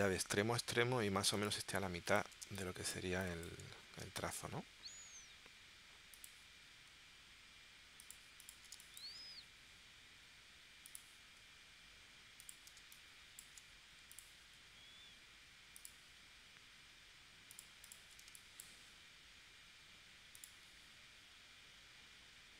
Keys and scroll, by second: 2.4 space, 4.0 space, 8.7 space, 12.8 space, 18.3 space.